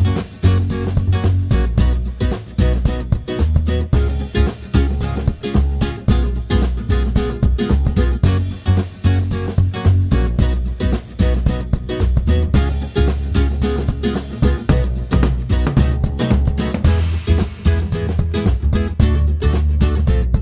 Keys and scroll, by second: 0.0-0.4 typing.